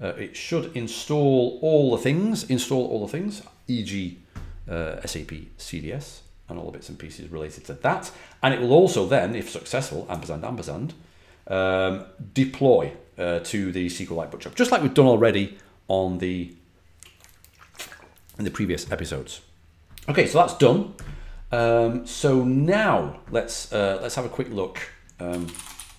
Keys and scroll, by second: 25.0-25.9 typing.